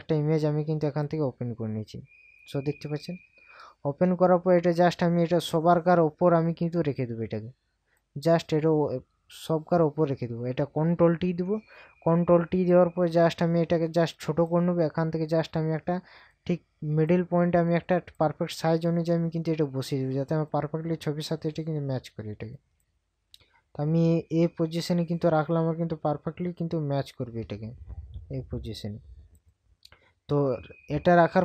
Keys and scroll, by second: 3.6 ctrl+KP_Subtract, 11.1 ctrl+t.